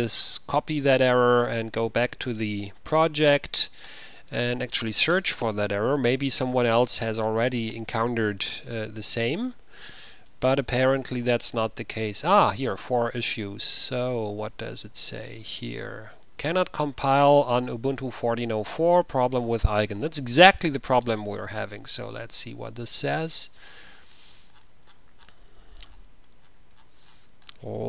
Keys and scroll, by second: 5.1 ctrl+v, 5.2 Return, 10.5 Return.